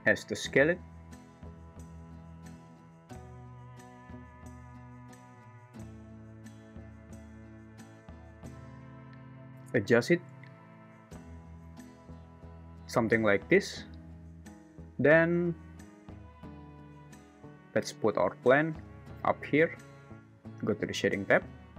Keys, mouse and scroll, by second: 0.0 s, 2.0 `, 3.0 s, 4.0 alt+z, 4.5 s, 8.8 s, 15.3 alt+z, 18.8 g.